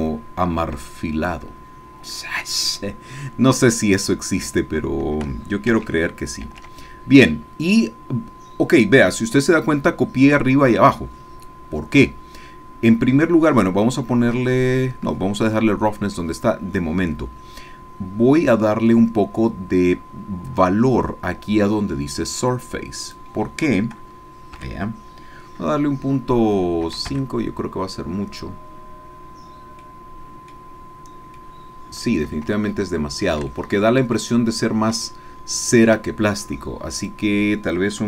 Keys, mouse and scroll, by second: 0.0-4.2 drag, 5.7 ctrl+c, 6.4 ctrl+v, 23.0-24.0 drag, 26.9 KP_5, 30.2 click, 31.4 click, 32.3-33.4 shift+drag, 33.5 shift+click, 35.1-36.1 shift+drag, 37.0 click.